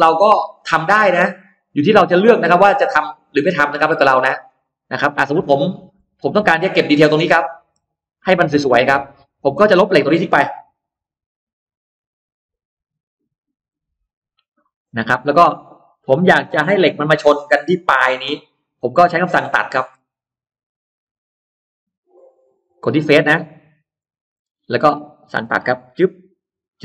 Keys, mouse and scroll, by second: 0.7 scroll down 2, 1.4-2.1 scroll down 2, 2.2-4.0 middle drag, 4.1-4.4 scroll down 2, 5.4-5.7 scroll down 2, 5.9 middle click, 6.7-7.4 scroll down 4, 7.3 middle click, 7.7-8.8 scroll up 6, 9.3-10.1 scroll down 4, 9.6 middle click, 10.3 scroll up 2, 11.3 e, 11.9 click, 13.1-13.5 scroll down 2, 13.7 scroll down 2, 14.4 middle click, 14.9-15.2 scroll down 2, 15.1-16.3 middle drag, 16.7-17.4 scroll up 1, 17.2 middle click, 17.8-18.1 scroll down 1, 18.5 scroll up 1, 18.6-19.7 middle drag, 21.3 click, 22.5 click, 23.1-23.4 scroll up 1, 23.8 click, 24.1-24.5 scroll down 1, 25.1 middle click, 25.6 click, 26.5 click.